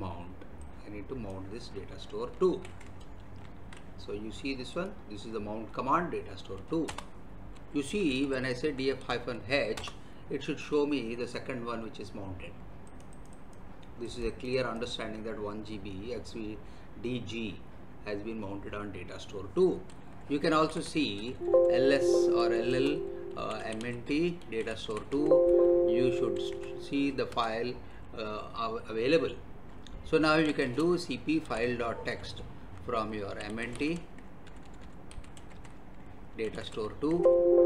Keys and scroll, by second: 2.4 ctrl+c, 3.7 alt+Tab, 6.9 Return, 7.7-9.0 typing, 9.7 Return, 20.6-25.1 typing, 25.1 Tab, 26.2 2, 26.5 Tab, 27.3 Return, 30.0-37.0 typing, 37.1 Tab.